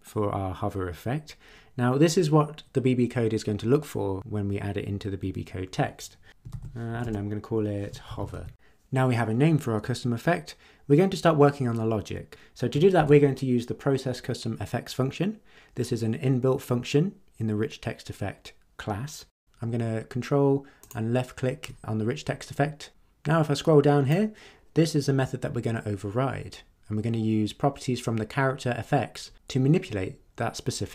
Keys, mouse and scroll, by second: 6.3 space, 6.5 shift+;, 6.9 shift+=, 7.0 shift+space, 8.1 shift+2, 8.3 shift+Left, 12.9 ctrl+v, 20.8 ctrl+click, 22.7-24.2 drag.